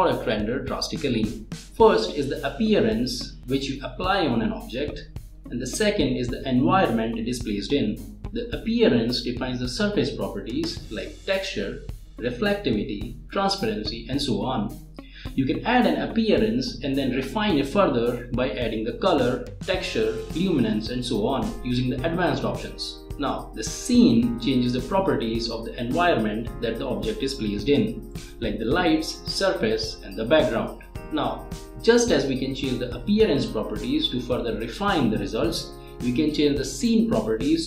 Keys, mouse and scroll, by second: 25.4 click, 29.5-30.0 scroll down 1, 31.8 scroll up 1, 33.7 click, 35.0-35.3 scroll down 1, 35.8 scroll up 1.